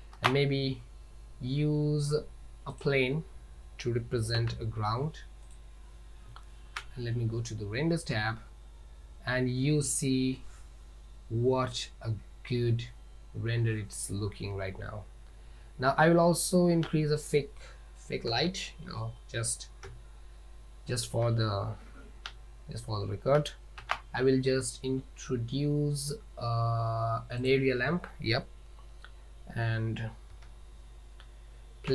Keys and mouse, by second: 0.2 shift+a, 4.4 s, 6.3 z, 15.7 z, 18.3 KP_0, 19.9 KP_7, 21.3 z, 23.9 shift+a, 30.4 KP_1.